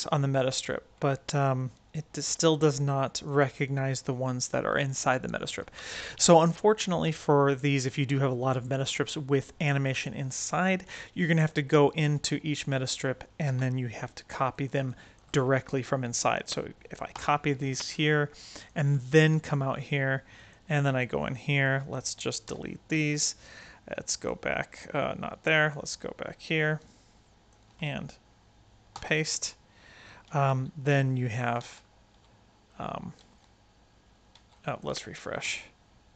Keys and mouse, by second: 0.4 Tab, 1.5 click, 2.6 click, 3.1 click, 5.3 click, 5.8 Tab, 7.6 click, 9.6 click, 11.3 click, 11.8 click, 12.2 Tab, 13.4 a, 14.4 click, 14.8 drag, 17.0 ctrl+c, 18.4-19.5 drag, 20.3 click, 20.9 Tab, 21.5-21.9 drag, 22.4 x, 24.9-26.4 right drag, 26.6 right click, 28.9 ctrl+v, 30.4 space, 31.5 space, 32.0 Tab, 32.6 right click, 33.2 space, 34.3 space, 34.5 right click, 34.6 click, 35.0 r, 35.3 space.